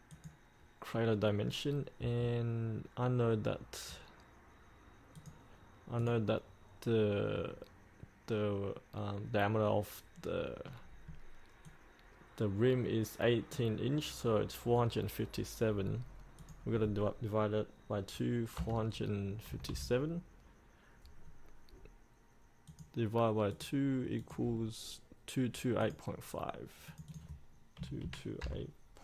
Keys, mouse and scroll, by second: 0.2-13.8 drag, 18.7 KP_4, 22.8-27.0 drag, 28.0 KP_2.